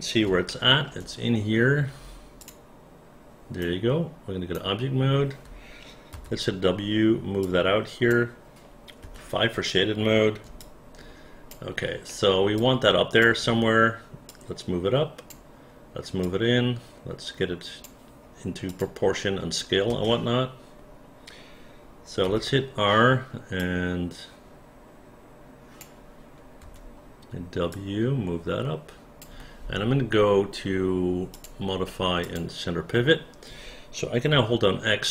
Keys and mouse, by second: 0.5 alt+middle click, 2.4 click, 3.6 right click, 6.1 w, 7.4 click, 9.0 5, 10.6 alt+click, 12.1 alt+middle click, 12.6 alt+click, 14.3-15.3 drag, 16.2-17.8 drag, 18.7 click, 19.9 space, 22.3 r, 23.6-25.8 drag, 26.6 w, 27.7-29.2 drag.